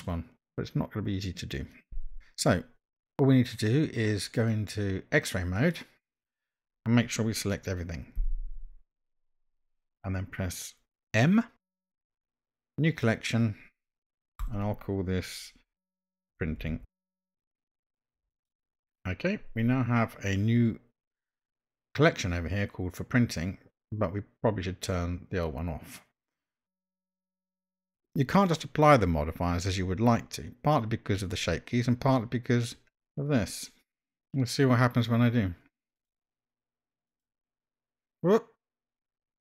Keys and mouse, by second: 5.6 click, 8.4 a, 11.7 m, 27.0 click, 27.7 drag, 36.0-37.6 drag.